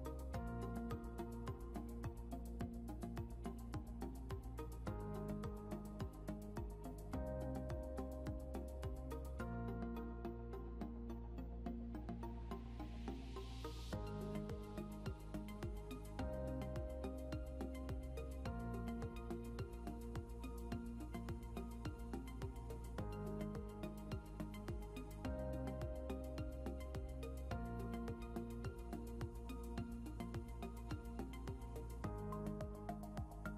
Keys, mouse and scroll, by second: 1.2 click, 7.0 click, 10.7 click, 13.1 shift+k, 14.4-15.3 typing, 16.7 click, 21.4 click, 23.8 click, 29.7 click, 31.6 click.